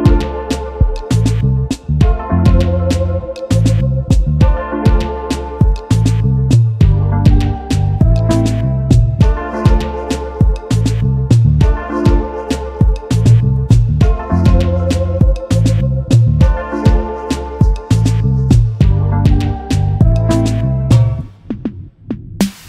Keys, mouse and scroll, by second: 3.4 ctrl+g, 4.4-4.7 alt+scroll down 1, 8.9 alt+scroll down 1, 11.4 Delete, 12.7 space, 15.4 alt+shift+click, 17.4 space, 20.9 alt+shift+click.